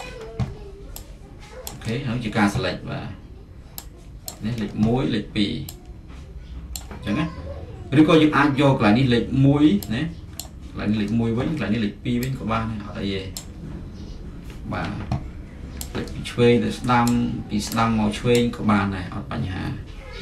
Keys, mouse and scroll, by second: 4.2-6.4 drag, 6.6-8.9 drag, 10.4-12.6 drag, 13.3-15.6 drag, 17.0-20.2 drag.